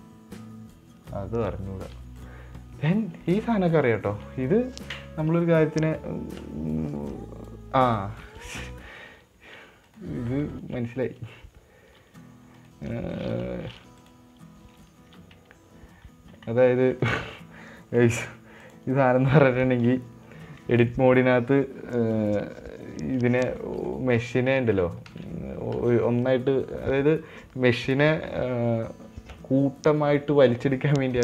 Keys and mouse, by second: 2.5-8.4 drag, 10.7 middle click, 11.0 Tab, 11.3 click, 12.3 g, 14.4 click, 18.2 Tab, 19.0 click, 21.2 Tab, 22.5-24.1 right drag, 24.3 right click, 24.5 Tab, 25.0 ctrl+z, 25.6 ctrl+z, 26.3 ctrl+z.